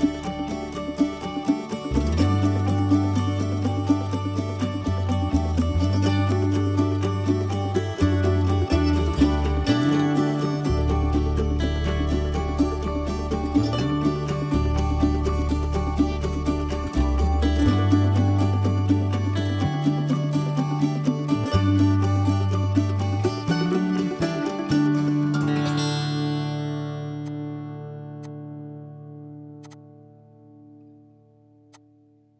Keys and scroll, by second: 18.3 b, 22.1 Escape, 22.2 Escape, 22.3 Escape, 28.0 ctrl+a, 29.4 ctrl+h.